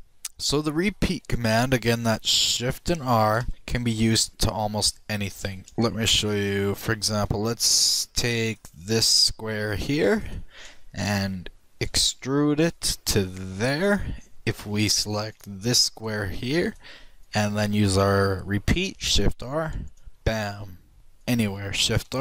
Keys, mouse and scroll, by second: 3.5 shift+e, 3.7 shift+r, 5.1 click, 5.6-7.2 shift+right drag, 6.6-7.0 shift+drag, 7.2-9.4 middle drag, 9.2-12.7 shift+right drag, 12.5 e, 16.2-19.9 shift+right drag, 20.5 shift+r, 21.0 click, 22.0-22.2 shift+right drag.